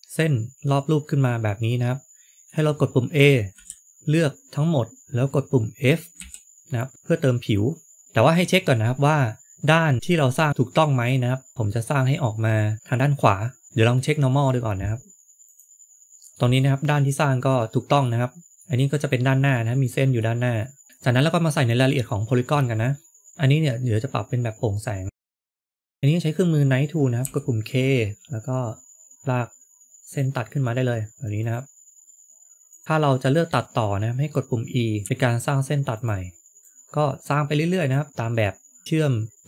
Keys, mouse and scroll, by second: 3.4 a, 6.1 f, 9.0 scroll up 2, 9.9 middle click, 11.6 middle click, 13.6 middle click, 13.7 click, 16.3 shift+middle click, 16.3 scroll up 2, 16.5 middle click, 19.6 middle click, 20.5 middle click, 23.3 click, 27.1 k.